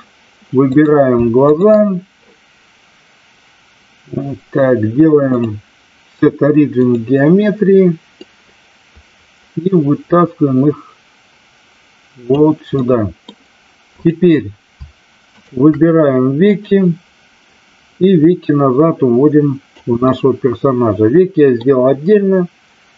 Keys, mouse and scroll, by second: 0.7 click, 5.4-6.9 drag, 8.3-12.3 drag, 12.7-13.1 middle drag, 13.9 click, 15.3 shift+click, 16.5-19.7 drag, 20.0-21.6 middle drag.